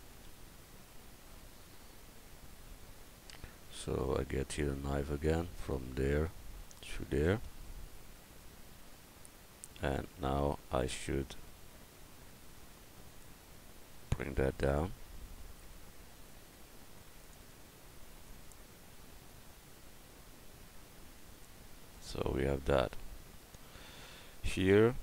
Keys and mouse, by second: 0.6 KP_1, 14.2-16.4 drag, 15.5-17.4 right drag, 17.2-21.4 drag, 19.3-21.4 right drag.